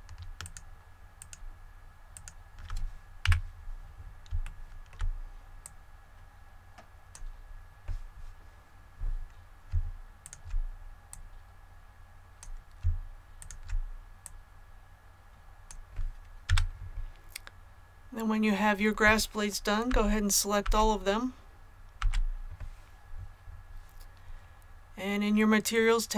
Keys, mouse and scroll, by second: 0.3 alt+shift+right click, 3.2 KP_1, 4.4 shift+middle click, 4.4 shift+scroll up 1, 5.5-7.7 drag, 10.1 alt+right click, 11.0 click, 13.3 alt+right click, 14.1-15.7 drag, 16.4 a.